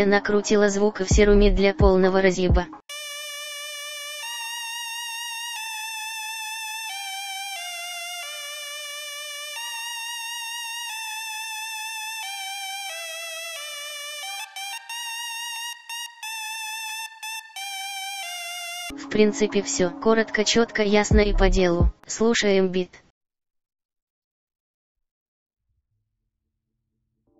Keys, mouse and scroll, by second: 19.0 F1, 19.3 F1, 20.0 F1.